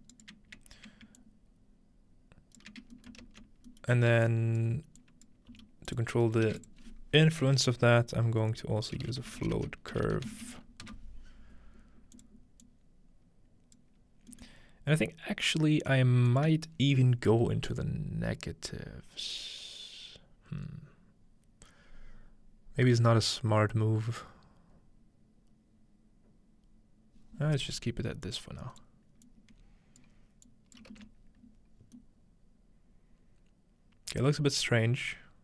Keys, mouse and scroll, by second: 0.0-1.2 shift+right drag, 3.1-4.5 ctrl+shift+middle drag, 4.5-7.2 drag, 5.5-6.5 typing, 6.1-6.5 scroll down 1, 6.3 shift+middle click, 9.0-10.4 typing, 12.2-18.3 drag, 14.3-16.3 middle drag, 28.3-32.9 drag, 34.5-35.4 middle drag, 34.9-35.4 scroll up 2.